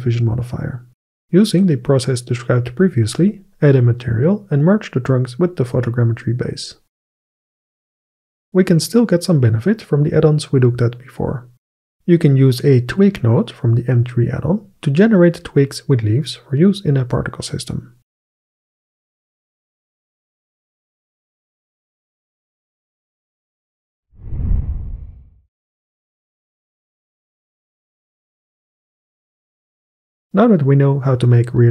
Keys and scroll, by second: 16.4 ctrl+space.